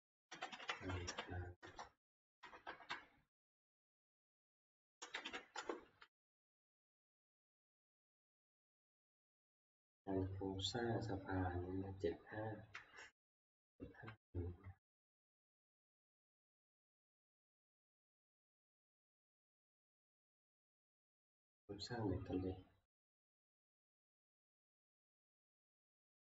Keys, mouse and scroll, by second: 0.2-1.5 typing, 1.7 Return, 2.7 Up, 2.7 Right, 2.9 Right, 4.1 Up, 4.1-5.8 typing, 4.1 F2, 4.4 Home, 6.9 Up, 6.9 F2, 7.6 ctrl+Up, 12.8 Down, 13.0 Down, 14.1 ctrl+Down, 15.8 ctrl+Down, 16.4 ctrl+Down, 18.2 Down, 19.6-20.3 Down, 23.9 click, 24.9 ctrl+Page_Down, 24.9 scroll down 7.